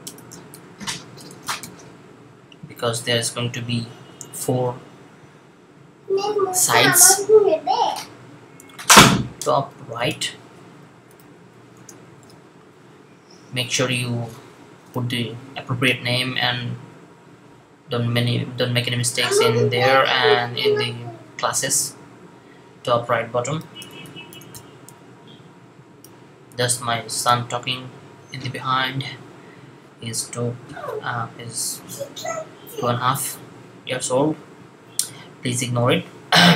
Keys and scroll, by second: 1.2 super+v, 10.7-12.1 typing, 23.4-24.4 typing.